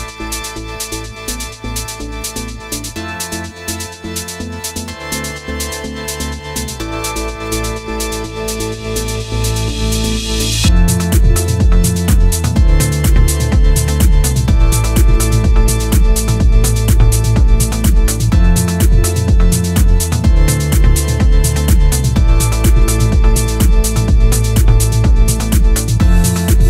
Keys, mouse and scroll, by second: 0.5-0.8 scroll down 2, 0.8 middle click, 1.5-2.3 scroll up 2, 2.5 ctrl+z, 3.4 ctrl+z, 3.7 ctrl+z, 5.3 click, 9.0 ctrl+z, 9.5-10.6 scroll up 4, 10.6 click, 11.7 click, 12.3-12.7 scroll up 1, 12.7-13.6 scroll down 5, 13.6 click, 15.7 click, 17.4 click, 18.2 click, 19.0 click, 19.6 scroll down 2, 19.8 middle click, 21.9 shift+r, 22.7-23.1 scroll down 3, 23.1 middle click, 23.8-24.9 scroll up 4, 24.9-25.8 scroll down 3, 26.5 click.